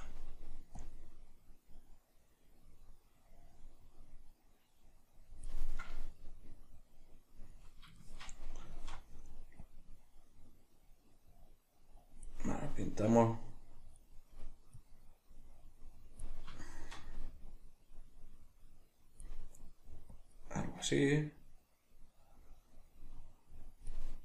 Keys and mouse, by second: 0.8-8.0 drag, 8.0-9.6 shift+middle drag, 9.6-12.6 drag, 12.6-13.6 middle drag, 13.6-16.6 drag, 16.6-17.5 shift+middle drag, 17.5-24.2 drag.